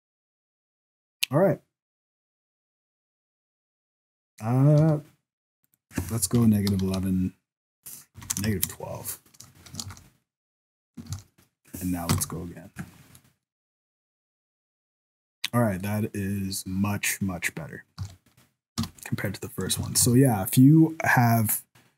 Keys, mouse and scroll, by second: 5.6 click, 6.8 KP_1, 8.3 BackSpace, 9.9 ctrl+s, 11.1 ctrl+s, 12.1 F12, 19.6 scroll up 2, 19.8 ctrl+s, 20.1 alt+a, 20.5-21.9 scroll down 1.